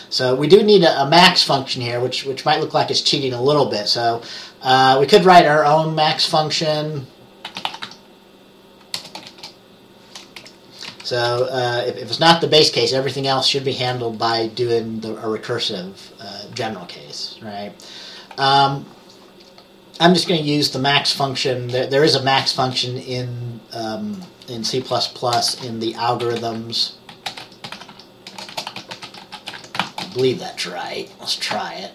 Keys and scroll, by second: 7.4-9.4 typing, 9.1 Return, 10.5 Up, 11.0 Down, 11.4 Return, 14.4 Return, 24.9 Return, 25.6-30.6 typing.